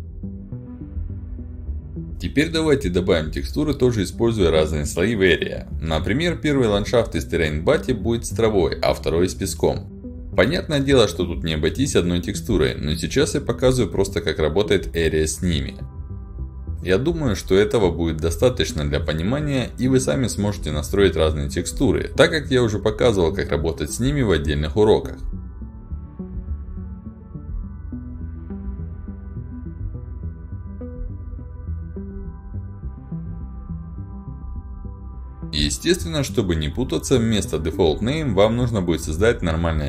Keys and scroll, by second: 6.8 ctrl+alt+d, 8.5 w, 8.9 a, 10.0-12.0 typing, 24.3-25.3 typing, 26.3-30.1 typing, 31.1 e, 33.1 d, 34.1 s, 35.4 ctrl+alt+d, 36.2 ctrl+alt+d.